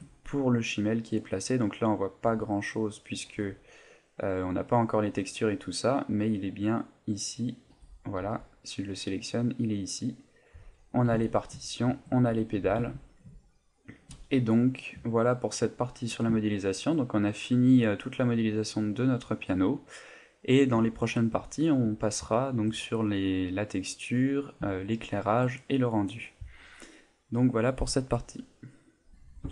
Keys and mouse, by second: 0.1 middle click, 1.6 middle click, 2.3 z, 2.6 middle click, 3.3 z, 3.6 middle click, 5.7 middle click, 7.0 right click, 7.5 right click, 7.7 z, 8.2 z, 8.6 middle click, 10.5 right click, 11.1 g, 11.9 shift+click, 12.7 g, 14.2 shift+click, 14.2 a, 14.3 middle click, 15.2 ctrl+middle click, 15.8 middle click, 16.5 shift+middle click, 17.6 middle click, 20.9 shift+middle click, 24.8 shift+middle click.